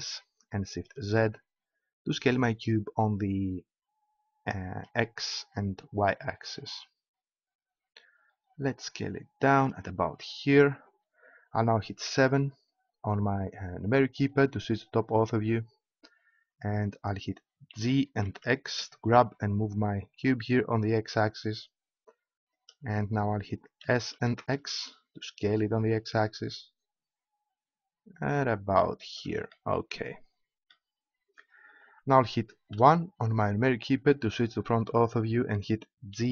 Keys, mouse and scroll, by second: 9.6-11.9 drag, 12.0 KP_7, 17.8 g, 19.0 g, 22.6-24.3 drag, 23.8 s, 29.1-31.0 drag, 32.8 KP_1, 36.1 g.